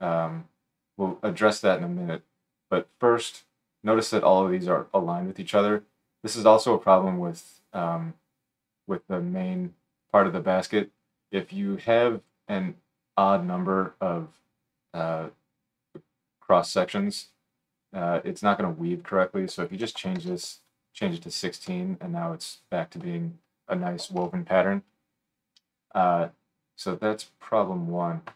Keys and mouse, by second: 28.1-28.3 shift+drag, 28.1-28.3 shift+right drag.